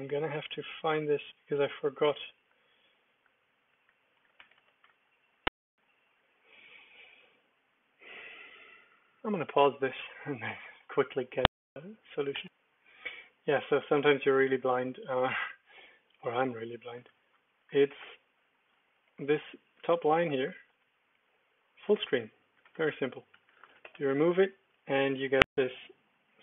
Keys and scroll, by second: 2.4 ctrl+d, 3.2 ctrl+d, 3.4 ctrl+d, 3.7 ctrl+d, 4.3 g, 4.5 g, 16.1 v, 16.5 ctrl+r, 17.1 ctrl+4, 18.0 Escape, 18.9-20.7 typing, 22.0 Escape, 22.7 Escape, 22.9 Escape, 23.1-24.6 typing, 24.7 super+d.